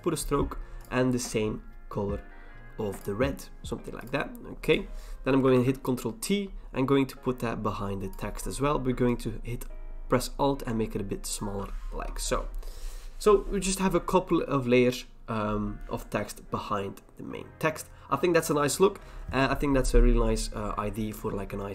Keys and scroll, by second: 5.5 ctrl+t, 11.9 Return.